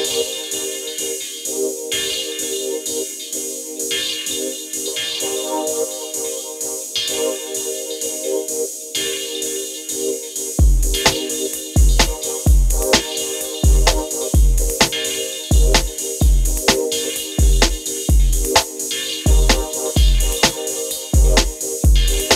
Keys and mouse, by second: 1.5 click, 2.1 shift+click, 6.9 click, 11.8 shift+click, 12.2 shift+click, 18.7 click, 19.3 click, 20.8 click.